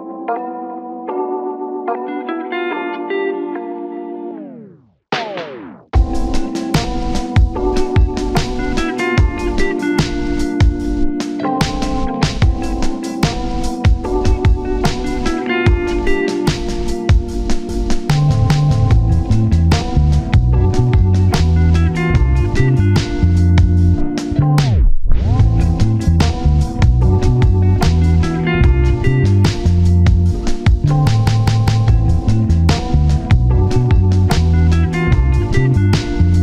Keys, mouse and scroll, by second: 3.9 scroll down 1, 5.9 ctrl+z, 6.9 double click, 7.3-7.7 scroll up 1, 7.8 shift+click, 8.8 shift+scroll down 1, 9.4 shift+click, 11.4 shift+click, 11.9 scroll down 1, 13.5-13.9 scroll up 1, 13.9 i, 15.7 scroll up 1, 15.9 i, 16.8 scroll up 1, 18.3 double click, 21.8-22.2 scroll down 1, 22.2-23.1 scroll up 1, 25.2 double click, 25.9 scroll down 1, 26.0 shift+middle click, 26.8-27.5 scroll up 2, 27.0 shift+middle click, 27.5-28.0 scroll down 1, 28.0 double click, 30.1-30.7 scroll up 1, 31.4 scroll, 35.0 scroll down 1, 35.7 scroll up 1.